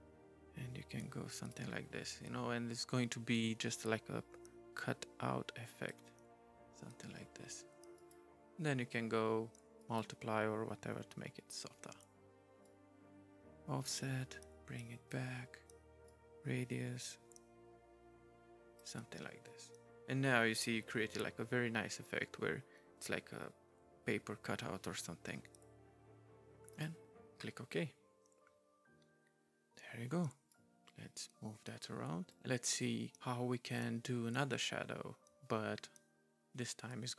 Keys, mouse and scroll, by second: 3.3 right click, 7.9 right click, 9.8 right click, 12.6 right click, 16.1 right click, 26.7 right click, 30.5 right click.